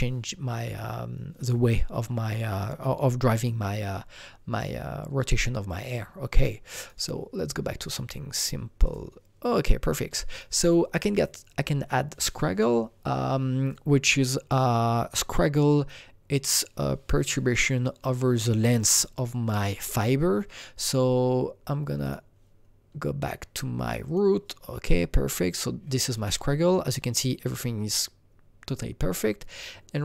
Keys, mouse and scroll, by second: 5.6 click, 6.7 click, 6.8 click, 7.8 click, 8.8 click, 13.6-18.2 drag, 22.0-23.2 drag, 23.2 click, 24.0 click, 26.0-30.0 drag.